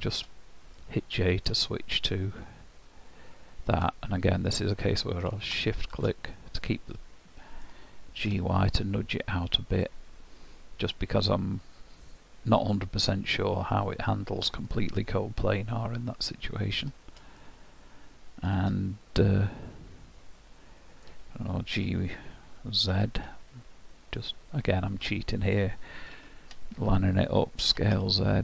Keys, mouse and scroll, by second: 0.8 middle click, 6.4 middle click, 8.2 g, 14.7 middle click, 17.4 shift+middle click, 19.3 middle click, 21.8 g, 26.2 ctrl+KP_3, 27.7 s.